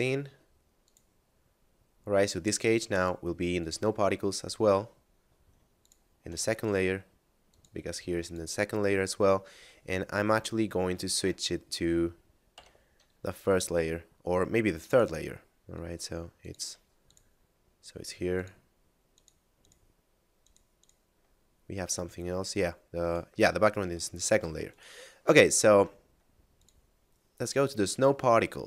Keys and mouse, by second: 0.8 click, 2.1 right click, 2.9 click, 5.7 shift+click, 6.5 right click, 7.5 click, 10.3 click, 10.9 right click, 11.1 x, 12.5 m, 14.8 click, 17.1 shift+click, 18.3 shift+click, 19.1 shift+click, 20.3 shift+click, 20.7 shift+click, 21.5 shift+middle click, 22.9 right click, 23.5 a, 24.1 shift+middle click, 24.7 right click, 25.5 shift+middle click, 26.6 click.